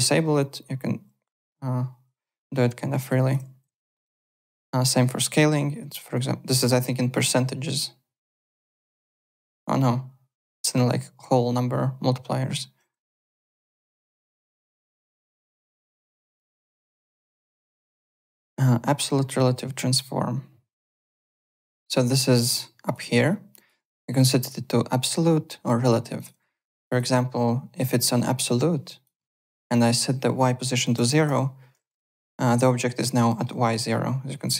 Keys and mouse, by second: 0.4 click, 3.4 ctrl+z, 4.4 r, 5.3 middle click, 7.1 click, 13.8 click, 14.6 click, 16.2-17.1 typing, 17.3 alt+click, 21.1 click, 21.7 w, 22.8 click, 23.5 click, 26.1 click, 26.8 click, 27.9 click, 28.8 alt+click, 29.2 alt+middle click, 29.8 click, 30.9 KP_0, 31.1 KP_Enter, 32.0 alt+click, 33.3 alt+middle click.